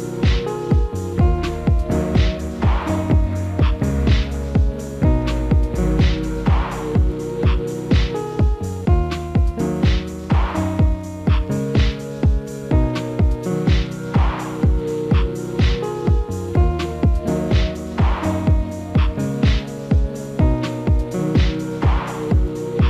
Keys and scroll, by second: 15.7 alt+w, 21.4 alt+w.